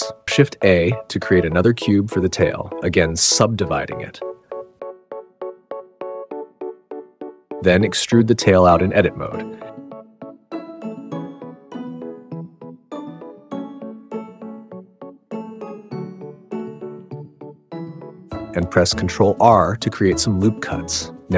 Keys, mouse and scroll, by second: 0.0 super+s, 0.0 shift+a, 0.2 click, 0.4 shift+a, 2.1 ctrl+1, 3.1 drag, 6.2 3, 6.9 g, 7.6 click, 7.9 Tab, 8.7 click, 10.1 e, 10.7 Tab, 11.0 s, 12.0 Tab, 12.5 g, 13.1 y, 13.5 click, 14.9 g, 15.0 y, 15.3 click, 15.8 Tab, 16.0 g, 16.5 r, 17.1 g, 17.6 Tab, 18.6 super+z, 19.1 ctrl+r.